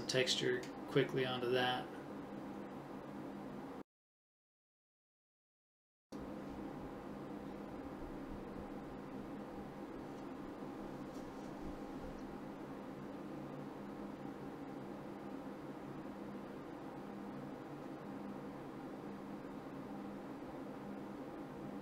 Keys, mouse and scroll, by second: 0.0 ctrl+KP_3, 1.1 middle click, 2.8 ctrl+KP_3, 3.6 right click, 5.7 click, 8.9 right click, 9.9 middle click, 11.3-12.8 right drag, 13.8 click, 14.8 right click, 15.3 middle click, 15.8-16.9 middle drag, 17.0 KP_7, 17.6 right click, 18.1 middle click, 18.6 middle click, 19.7-21.4 right drag.